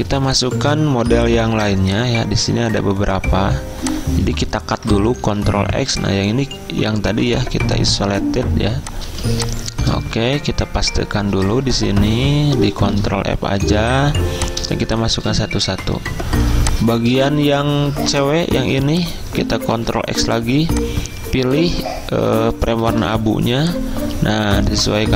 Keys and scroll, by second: 1.1 v, 5.3 ctrl+x, 8.6 z, 9.9 v, 11.7 ctrl+f, 13.8 v, 22.9 ctrl+x, 22.9 ctrl+z, 22.9 ctrl+f.